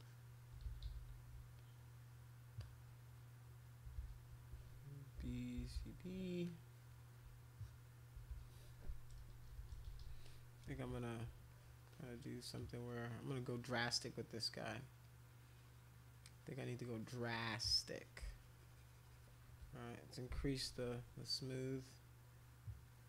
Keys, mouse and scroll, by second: 0.0 alt+click, 0.6 ctrl+z, 0.8 ctrl+z, 1.5 click, 2.6-3.6 drag, 4.0 ctrl+z, 4.9-6.2 typing, 6.5 click, 7.4 alt+click, 8.3-10.0 typing, 10.2 click, 11.5 alt+click, 11.9 alt+click, 12.6-13.9 alt+drag, 14.0 alt+click, 15.0-18.1 alt+drag, 18.3-19.3 shift+drag.